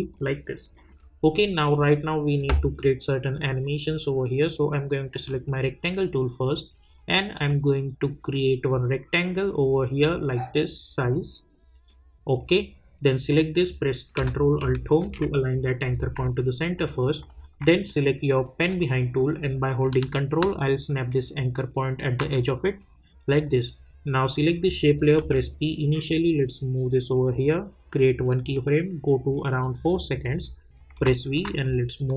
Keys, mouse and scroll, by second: 7.4-13.3 drag, 15.0 ctrl+alt+Home, 16.7-17.6 alt+scroll up 2, 18.8 click, 20.3-22.5 ctrl+drag, 25.2 p, 26.3 click, 30.1-30.9 scroll down 1, 30.9 v, 31.3-32.1 drag.